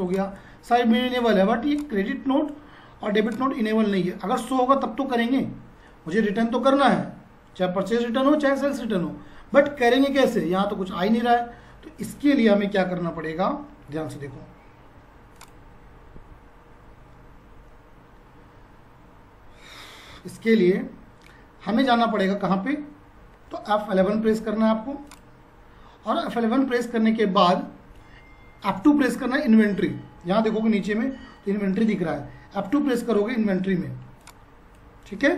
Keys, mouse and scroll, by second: 1.7 click, 2.0 Tab, 3.2 click, 3.5 Tab, 6.0 F5, 13.1 Tab, 14.9 F5, 19.9 F4, 24.0 F11, 25.0 click, 32.1 F4.